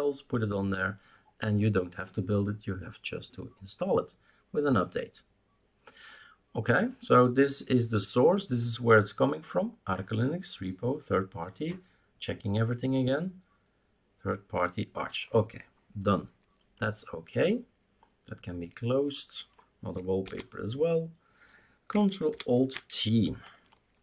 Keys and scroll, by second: 20.2 alt+t, 22.3 ctrl+alt+t, 23.8-24.0 typing.